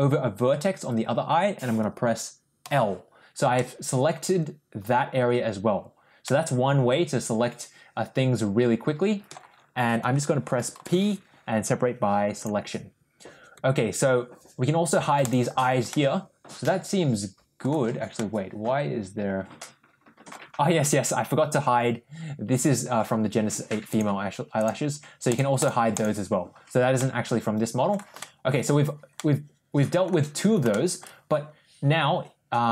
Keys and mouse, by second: 2.5 l, 3.4 middle click, 6.1-9.2 middle drag, 10.6 p, 15.1 click, 15.8-17.4 middle drag, 18.0-20.1 middle drag, 23.7 click, 24.4 click, 25.1 click, 25.4 click, 25.8 click, 26.8 middle click, 28.0 shift+middle click, 29.0 middle click, 30.6 shift+middle click.